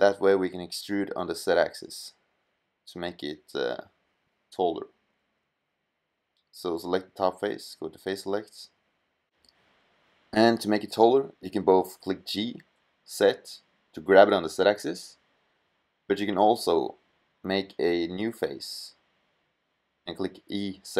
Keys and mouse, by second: 5.2-5.8 middle drag, 7.0 middle click, 10.0 middle click, 17.3 e.